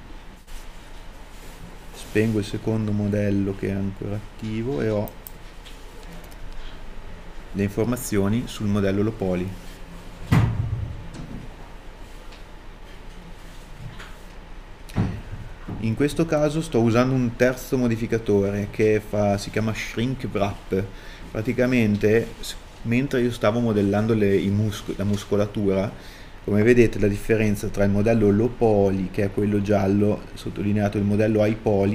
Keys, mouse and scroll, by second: 12.2 KP_1.